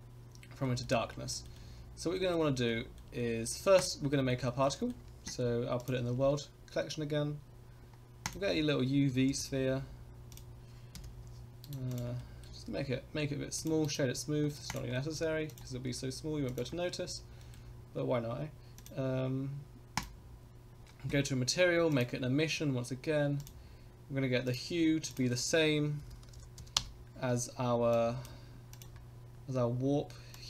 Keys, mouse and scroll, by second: 0.6 shift+middle drag, 1.1 scroll up 1, 1.3 shift+middle drag, 1.5-2.3 middle drag, 2.7-3.0 shift+middle drag, 3.2 middle drag, 3.5-3.8 scroll down 2, 3.8 click, 4.1 middle drag, 4.5 shift+middle drag, 4.7 middle drag, 5.8 click, 6.2 shift+a, 9.1 g, 10.9 KP_Decimal, 11.6 right click, 12.2 middle click, 12.7 s, 13.8-14.4 right drag, 14.5 middle click, 14.7 click, 14.9 middle click, 15.5 click, 15.8 s, 17.0 scroll up 2, 17.4 shift+middle click, 18.7 click, 19.9 click, 21.9-23.4 drag, 24.4 click, 28.7 click, 30.3 click.